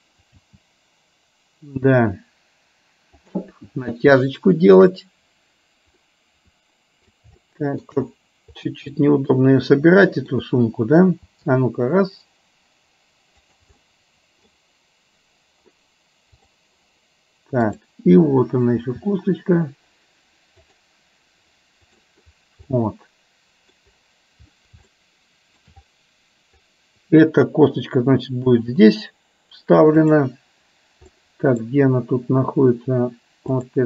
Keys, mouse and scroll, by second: 0.4 g, 4.2-4.9 shift+middle drag, 6.1-7.1 middle drag, 7.5 shift+middle click, 9.0-10.4 scroll up 1, 10.4-12.2 scroll down 1, 12.2 g, 13.9 middle click, 16.5 click, 19.7 g, 21.9 click, 22.7-23.9 middle drag, 25.0-25.9 shift+middle drag, 30.1-30.7 drag, 31.2-31.7 middle drag, 33.6 click.